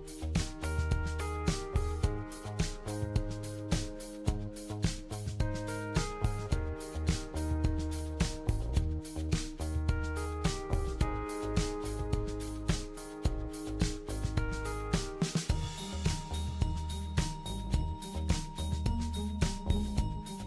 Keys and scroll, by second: 4.2-5.8 typing, 9.1-10.6 typing, 13.6-14.3 typing.